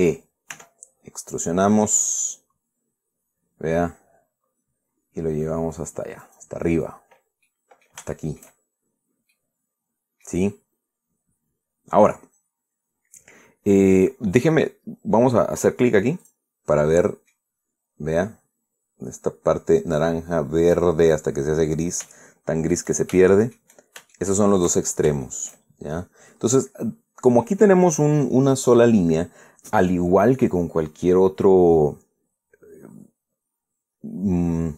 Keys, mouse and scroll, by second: 1.2 e, 6.9 click, 7.6-8.2 scroll down 1, 8.2 middle click, 8.8 shift+middle click, 9.4-9.8 shift+scroll up 3, 10.0-11.1 middle drag, 12.0-13.7 scroll down 2, 16.9 click, 17.7 middle click, 18.3-18.7 scroll up 1, 22.8 shift+middle click, 23.9 shift+middle click, 24.8 shift+middle click, 25.6 shift+scroll down 2, 25.9 shift+middle click.